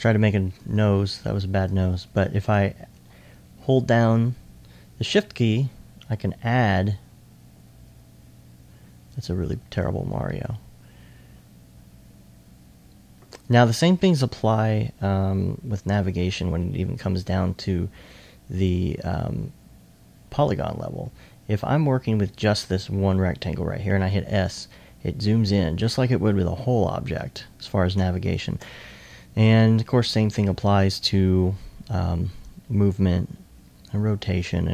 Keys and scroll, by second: 16.4 2, 16.9 2, 24.6 s, 24.9 s, 32.8 r.